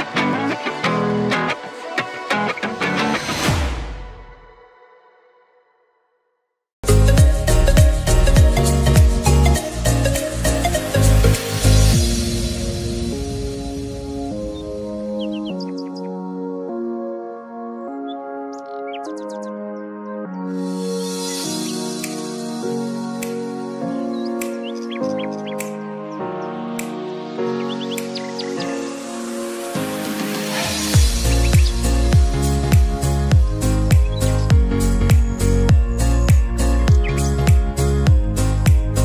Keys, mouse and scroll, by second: 2.9 click, 7.1-12.4 drag, 12.5-14.4 drag, 15.4-17.2 drag, 18.5 click, 19.5 alt+scroll down 1, 20.2 click, 25.8 ctrl+Num_Lock, 25.8 click, 26.1 ctrl+alt+F7.